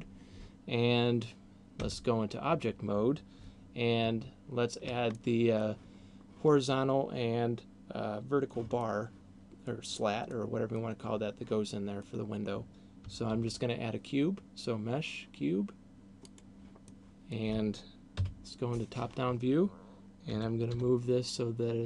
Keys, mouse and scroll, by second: 1.8 Tab, 5.0 middle click, 8.8 middle click, 10.3 middle click, 11.8 middle click, 13.3 shift+a, 16.8 middle click, 18.3 KP_7, 20.3 g.